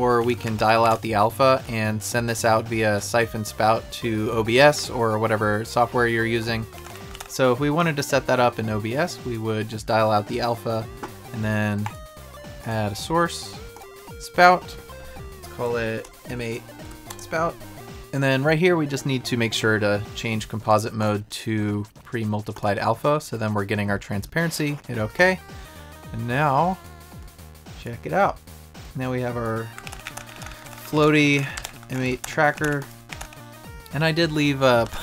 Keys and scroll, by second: 30.5 Right, 30.7 Up, 31.0 Down, 31.0 Right, 31.2 Down, 31.3 Right, 31.6 Up, 31.9 Down, 31.9 Right, 32.2 Right, 32.6 Down, 32.6 Right, 33.1 Down, 33.2 Right, 34.8 Up, 34.9 Right.